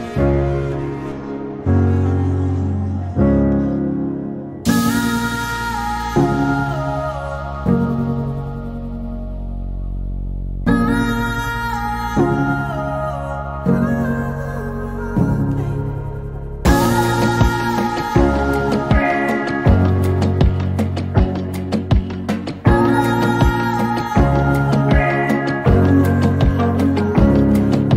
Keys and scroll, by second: 1.7 k, 3.7 k, 4.9 m, 7.0-8.2 typing, 11.5-13.8 typing, 15.1-17.5 typing, 20.7 m, 24.3 q, 26.6 m.